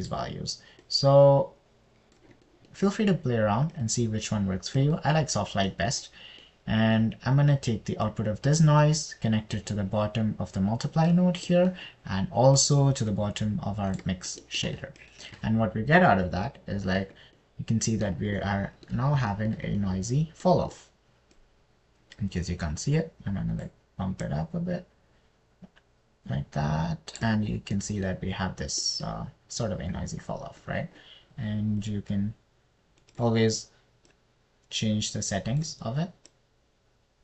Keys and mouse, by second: 0.3-1.5 drag, 2.3-3.6 drag, 5.3-6.4 drag, 9.5 click, 14.0 drag, 22.8 click, 22.9-25.0 middle drag, 25.7-28.6 middle drag, 31.8 click, 33.2 click, 35.5-37.0 drag.